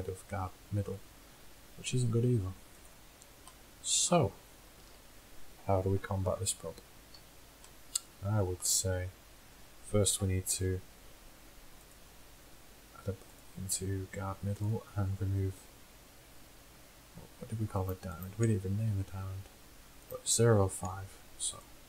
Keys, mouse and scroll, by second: 2.8-4.5 drag, 4.8 KP_1, 5.0 KP_1, 6.5 z, 7.3 z, 8.8 z, 9.3 z, 10.3 KP_1, 15.5 click, 21.6 middle click.